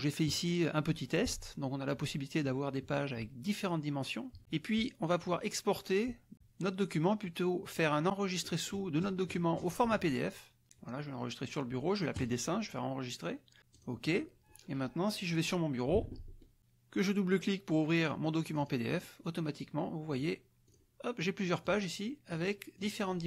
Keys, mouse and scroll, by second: 0.2 click, 5.2 click, 7.7 click, 12.2 click, 13.7 click, 16.0 alt+Tab, 18.5 click, 20.7 click, 21.7 click, 22.3 click, 22.8 click.